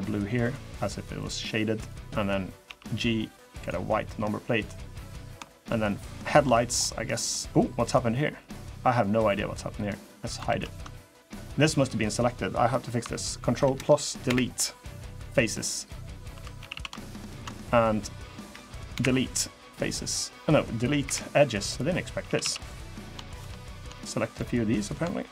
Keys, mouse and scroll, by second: 0.9 click, 1.5 click, 2.4 g, 3.9 scroll down 1, 4.0 middle click, 4.7 middle click, 5.2 shift+middle click, 5.6 middle click, 6.3 shift+middle click, 7.1 middle click, 7.6 click, 7.9 middle click, 9.0 click, 10.2 ctrl+z, 10.6 middle click, 10.9 scroll up 2, 11.6-12.0 scroll down 1, 13.4 ctrl+KP_Add, 14.0 Delete, 15.5 click, 16.1 2, 16.3 a, 16.5 a, 16.8 alt+shift+click, 18.7 Delete, 20.8 Delete, 22.0 a, 22.2 a, 22.7 click, 23.1 shift+click, 23.3 middle click, 23.8 shift+middle click, 24.1 middle click, 25.1 shift+click.